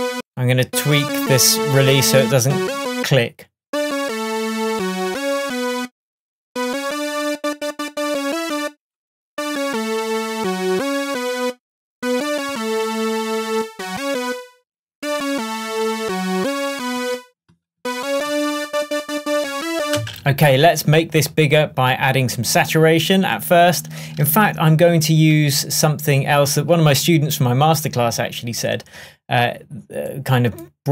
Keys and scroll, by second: 20.0 space, 20.6 super+space.